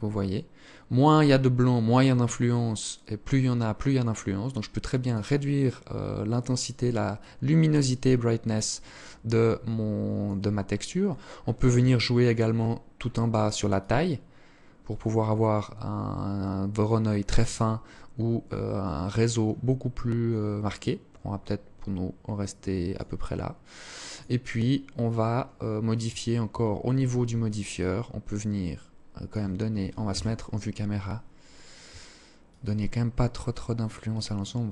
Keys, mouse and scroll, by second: 4.7 click, 6.2 click, 8.4 click, 9.7-12.8 scroll down 31, 12.8 click, 23.1 click, 26.8 shift+click, 29.1 KP_0, 31.5 shift+click.